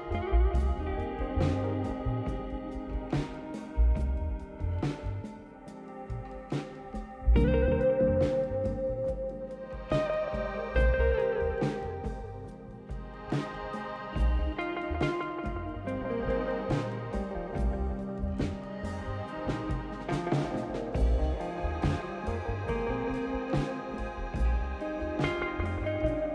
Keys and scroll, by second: 1.3-2.1 typing, 7.1-9.6 typing, 18.3 ctrl+d.